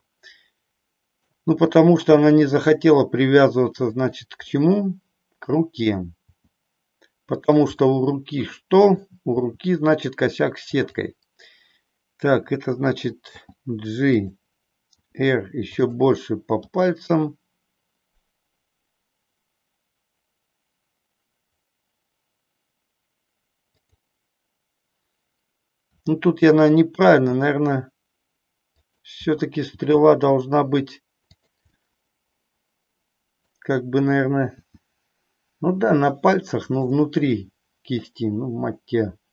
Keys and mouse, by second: 1.6 r, 4.0 click, 4.6 middle click, 6.2 r, 7.5 click, 7.7-9.1 middle drag, 9.4 r, 10.8 click, 13.5 g, 14.2 click, 15.0 r, 15.8 click, 16.6 g, 23.7 click, 25.8 r, 28.8 click, 29.6 g, 31.4 click, 31.7-33.6 middle drag, 34.6 r, 36.5 click, 36.8-38.0 middle drag.